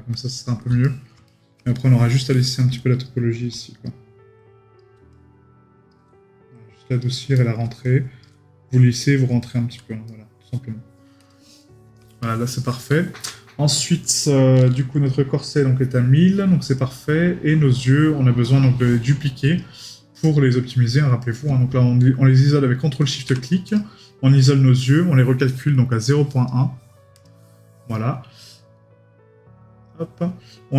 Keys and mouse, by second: 0.8 right click, 7.4 right click, 9.4 right click, 11.6 right click.